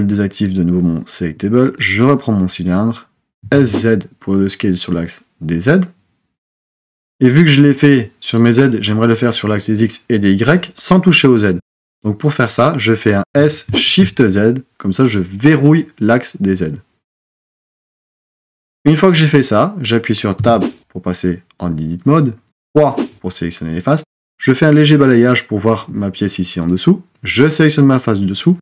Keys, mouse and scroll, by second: 0.4-3.4 drag, 3.4 s, 13.2 s, 20.4 Tab, 22.5 3.